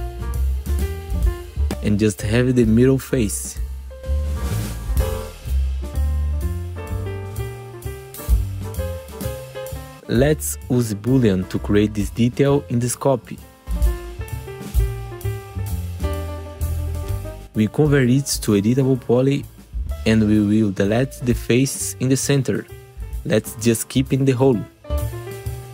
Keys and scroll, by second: 0.8 F4, 2.0 F3, 4.0 F3, 7.0 F4, 11.2 alt+q, 11.7 F4, 12.3 F4, 16.3 F4, 17.2 ctrl+t, 17.9 F4, 18.6 3, 21.7 5, 22.3 Delete, 23.5 3, 25.3 3.